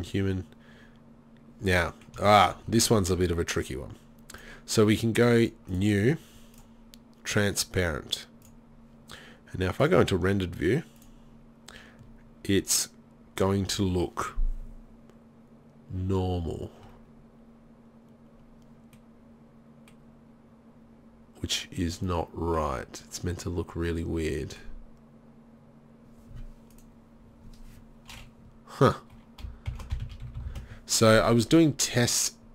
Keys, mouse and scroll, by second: 1.7 z, 4.4-8.6 drag, 9.9-10.2 drag, 11.3 click, 17.1-19.7 middle drag, 19.8 middle click, 27.0-29.9 drag, 29.9 middle click, 30.7 s.